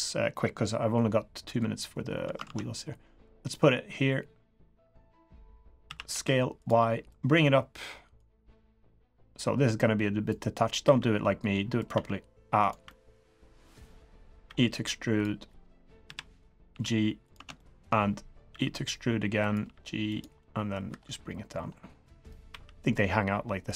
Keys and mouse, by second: 0.0-1.5 drag, 2.4 ctrl+z, 3.2-5.2 drag, 5.8 s, 7.1-8.1 drag, 8.3 middle click, 9.3 click, 10.8 e, 11.9 e, 12.8 click, 12.9 middle click, 13.8 click, 14.4 e, 16.0 KP_3, 16.7 g, 17.5-17.8 shift+drag, 18.5 e, 19.6 g, 20.4-20.7 drag, 20.9 3, 22.2 click, 22.5 e.